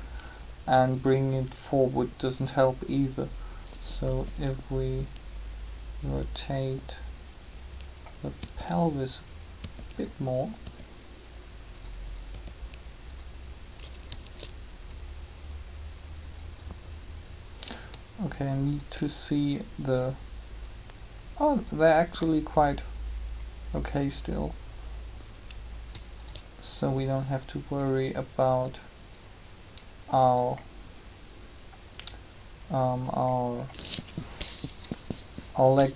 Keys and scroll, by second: 4.0 r, 8.3 r, 34.9 7.